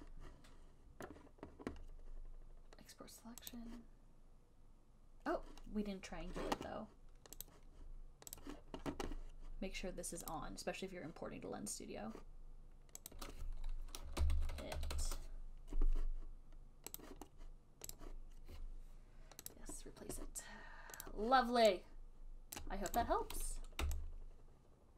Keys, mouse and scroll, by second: 3.8 click, 7.8 click, 8.8 click, 10.7 click, 13.4 click, 14.2-15.7 typing, 17.3 click, 18.3 click, 19.8 click, 21.3 click, 22.9 right click, 23.3 click.